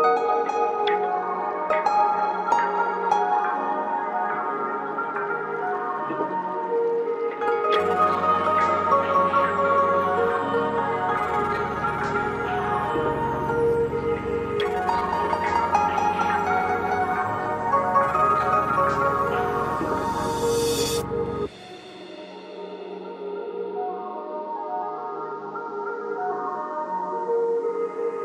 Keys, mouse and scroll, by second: 0.6-4.5 drag, 0.6 typing, 6.3 click, 10.6 click, 10.8 typing, 15.0-21.2 drag, 22.4 click, 22.4 typing, 27.2 click.